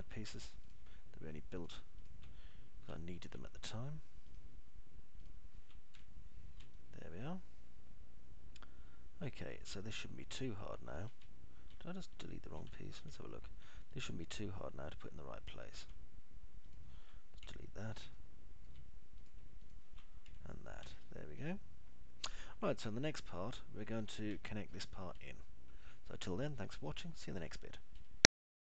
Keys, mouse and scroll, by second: 0.1 alt+middle click, 4.4 alt+middle click, 5.6 ctrl+click, 7.4 Delete, 8.2-12.2 alt+middle drag, 12.6 alt+middle click, 13.4 ctrl+z, 14.1 alt+middle click, 15.2 click, 18.7 Delete, 19.6 alt+middle click, 21.6 Delete, 22.4-25.4 alt+middle drag, 25.7 alt+middle click, 26.6 alt+middle click.